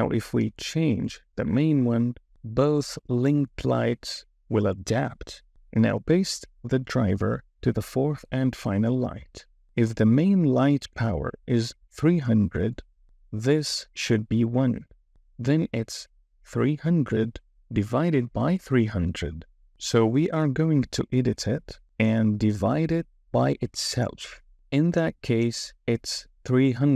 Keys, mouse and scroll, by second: 2.0 click, 7.9-10.7 right drag, 13.3 KP_0, 17.8-26.9 right drag, 26.5 KP_0.